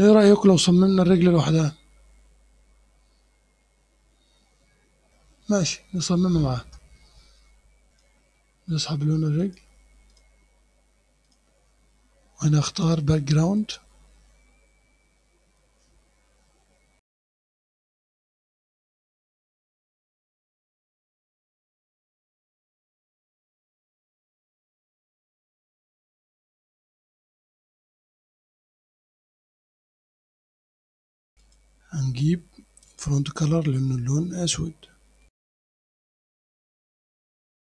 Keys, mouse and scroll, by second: 0.8-5.1 drag, 5.1-5.6 scroll down 1, 5.6 scroll up 1, 5.8-7.3 scroll down 1, 7.3-7.9 scroll down 1, 7.9 click, 8.3-9.4 scroll down 1, 9.4 click, 9.8-10.1 scroll down 1, 10.1 click, 10.4-11.3 scroll down 1, 11.3 click, 11.5-12.7 scroll down 1, 12.7 click, 13.6 click, 17.2 click, 17.4 click, 17.8 click, 18.3 click, 18.5 click, 18.7 click, 18.8-19.1 scroll up 1, 19.1 click, 19.4-19.7 scroll up 1, 19.7 click, 20.0-20.5 scroll up 1, 20.5 click, 20.9-21.3 scroll up 1, 21.3 click, 21.4 middle click, 21.6 scroll up 1, 21.8 click, 22.3-23.0 scroll up 1, 23.0 click, 23.5 click, 24.3 scroll up 1, 24.3 click, 24.7 click, 25.3 click, 25.8 click, 26.1 Return, 26.3 scroll down 1, 26.5 click, 26.6-27.6 scroll up 4, 26.9 click, 27.6 click, 28.5 click, 31.5 click, 32.9 click, 35.3 click, 35.9 click, 36.5 click, 37.4 click.